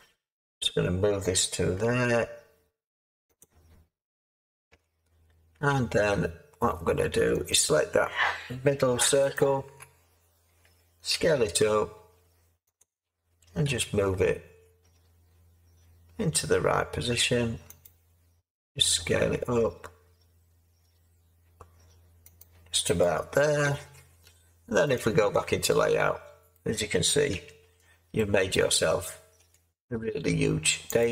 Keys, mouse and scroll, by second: 1.8 g, 4.7 Tab, 5.5 Tab, 11.1 s, 13.6 g, 18.7 s, 27.3 Tab, 29.3 Tab.